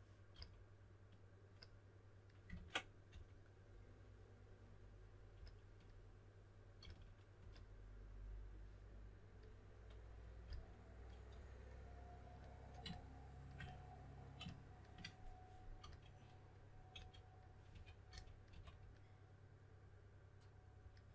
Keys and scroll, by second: 0.3 s, 2.5 super+z, 3.1 4, 5.1-7.3 typing, 10.4-11.3 typing, 15.8 s, 16.9-18.5 typing.